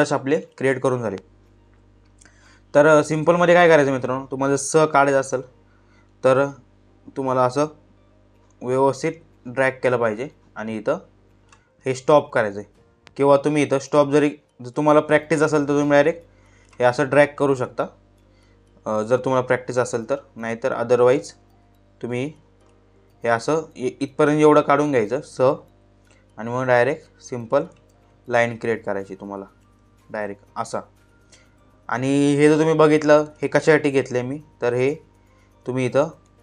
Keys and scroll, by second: 17.1 ctrl+z, 22.8 ctrl+z, 23.9 space, 27.4 ctrl+z.